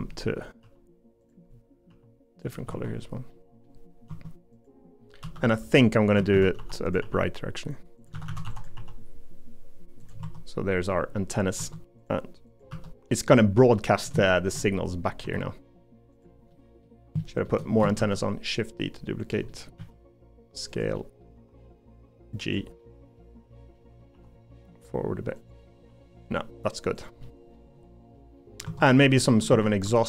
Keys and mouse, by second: 0.6 g, 1.9 g, 2.7 Tab, 3.3 middle click, 5.2-7.0 typing, 8.1 a, 8.3 a, 8.4 b, 8.8 g, 10.2 Tab, 10.9 middle click, 11.8 Tab, 12.7 l, 13.1 middle click, 13.7 middle click, 14.2 shift+middle click, 14.6 middle click, 15.2 c, 16.5 middle click, 17.2 middle click, 18.0 shift+d, 19.5 middle click, 19.8 s, 21.0 middle click, 21.4 g, 22.8 middle click, 23.7 middle click, 24.1 g, 27.2 middle click, 28.1 middle click, 28.6 Tab, 29.2 middle click, 29.5 Tab, 29.8 3.